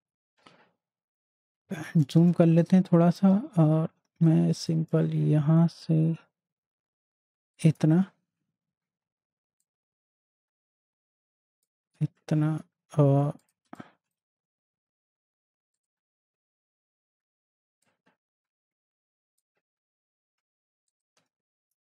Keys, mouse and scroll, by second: 1.6 click, 2.6 space, 2.8 click, 3.2 space, 4.5 click, 9.9-11.8 drag, 13.6 space, 14.0 click, 18.1-19.4 drag.